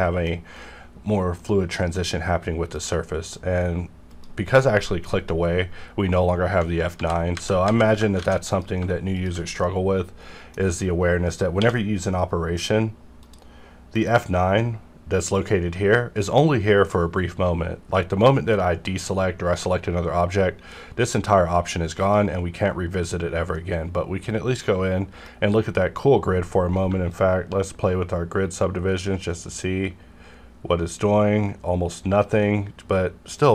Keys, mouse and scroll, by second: 2.7 F9, 4.1 click, 6.9 ctrl+z, 8.2 alt+a, 8.5 click, 9.1 shift+click, 9.6-11.6 middle drag, 11.6 q, 13.2 click, 13.9 F9, 15.3 click, 17.9-20.8 middle drag, 22.0 click, 23.5-27.1 middle drag, 27.1-33.5 shift+drag.